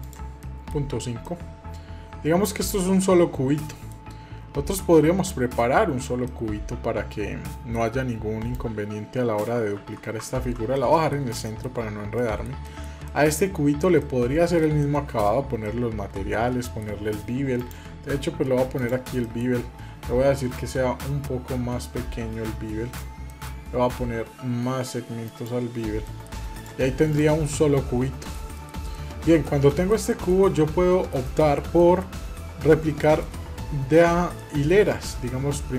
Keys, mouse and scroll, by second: 0.2-0.6 middle drag, 0.6-1.1 scroll up 2, 1.0-2.5 middle drag, 3.3 middle click, 5.0 click, 6.0-7.5 middle drag, 8.3 click, 9.5 ctrl+z, 10.1 ctrl+z, 10.5-10.9 middle drag, 11.2 shift+middle drag, 11.6 scroll up 1, 11.9 middle click, 12.4 shift+middle click, 12.8 middle click, 13.8 middle click, 14.6 middle click, 15.4-16.6 middle drag, 18.7 click, 19.0 middle click, 19.3 scroll up 2, 20.3-22.7 drag, 23.0 middle click, 25.0 click, 25.8 middle click, 26.3 click, 26.9 click, 27.3-28.1 middle drag, 28.3 middle click, 28.4 scroll down 1, 28.7 middle click, 29.2 scroll down 1, 29.4-30.1 shift+middle drag, 30.2-31.4 middle drag, 31.5 middle drag, 32.0-32.4 scroll down 2, 32.8-33.2 shift+middle drag, 34.1-34.8 middle drag.